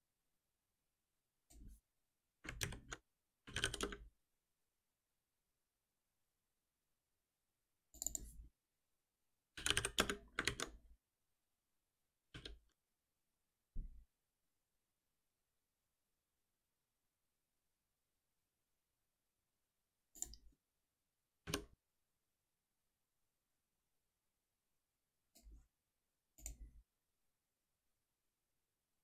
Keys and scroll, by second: 2.6 ctrl+alt+m, 10.0 Return, 10.4 ctrl+s, 12.3 shift+F10, 21.4 alt+F7.